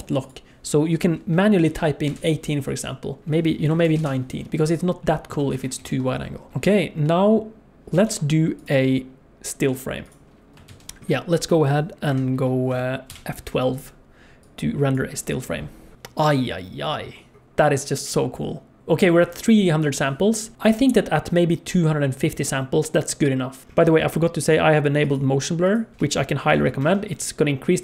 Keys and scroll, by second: 5.7 alt+a, 5.9 ctrl+s, 8.1 ctrl+s, 10.8 ctrl+s, 12.2 F11.